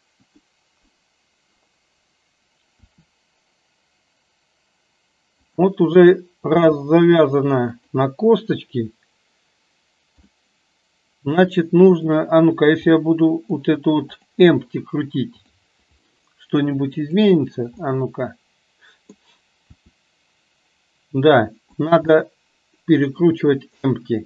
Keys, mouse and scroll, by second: 0.3 click, 2.8 r, 6.5 g, 10.4-11.5 middle drag, 13.0-13.8 middle drag, 14.2 click, 15.5 click, 17.0 click, 17.8-19.3 middle drag, 19.7 r, 22.2-23.3 middle drag.